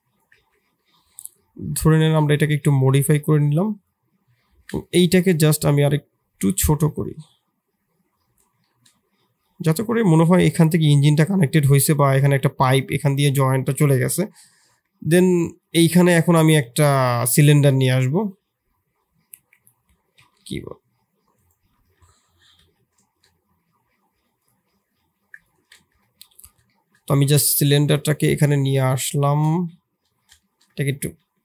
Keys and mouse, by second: 0.3 shift+z, 0.8 middle click, 1.3 middle click, 1.7 Tab, 2.0 middle click, 2.9 click, 4.9-8.6 shift+drag, 8.6-9.9 middle drag, 10.4-11.6 middle drag, 11.8-13.2 middle drag, 16.9 shift+s, 21.3 shift+click, 21.8 shift+s, 23.0 shift+a, 24.7 s, 25.8 KP_7, 26.7 shift+middle click, 27.2 g, 29.5 KP_3, 30.4 shift+middle click, 31.0 g.